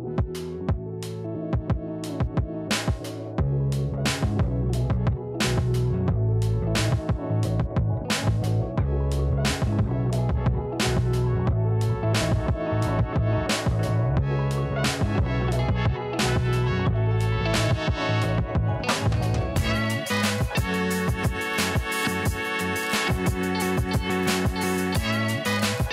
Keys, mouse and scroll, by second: 2.9 click, 3.8 KP_0, 4.2 KP_2, 4.4 Return, 5.5-7.5 drag, 8.1 click, 9.8-13.7 drag, 16.2 click, 17.3 click, 19.3-25.9 drag.